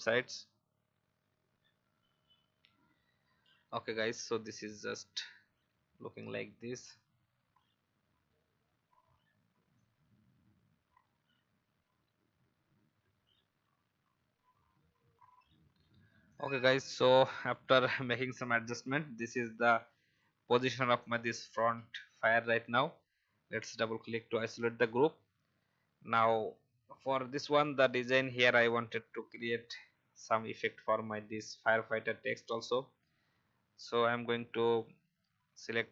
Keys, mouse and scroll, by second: 6.2 scroll up 1, 15.0 F10, 15.2-35.9 alt+shift+drag.